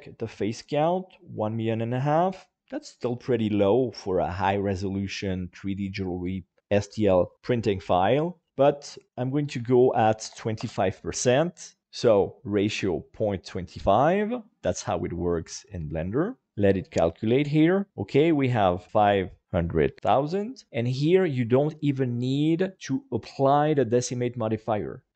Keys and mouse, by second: 8.7-16.5 drag.